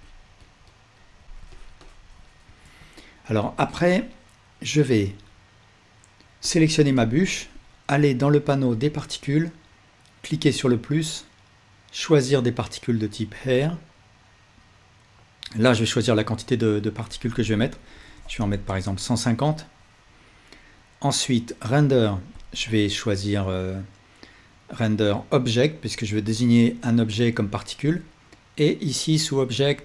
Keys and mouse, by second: 2.6 ctrl+Tab, 5.6-6.5 drag, 7.0-9.2 alt+drag, 10.4-13.5 drag, 17.2-29.8 drag.